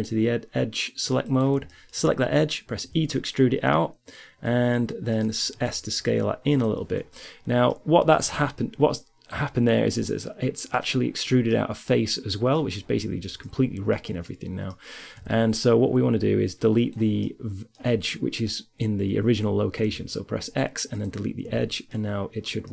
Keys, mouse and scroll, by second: 0.9 right click, 1.5 middle click, 2.8 e, 5.8 s, 7.9-9.3 middle drag, 8.5 z, 11.1 middle click, 11.3 middle click, 11.7 middle click, 14.5 middle click, 14.9 z, 15.7-16.7 middle drag, 16.7-18.9 right drag, 20.1 x, 20.5 z, 20.9 right click, 20.9 middle click.